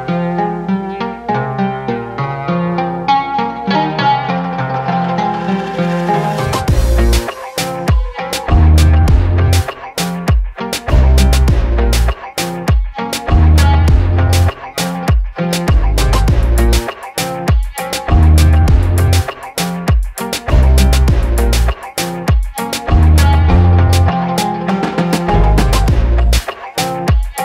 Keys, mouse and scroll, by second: 2.3 v, 3.5 click, 9.0 g, 11.4 g, 11.5 ctrl+space, 11.6 ctrl+alt+click, 12.3 space, 12.4-20.2 drag.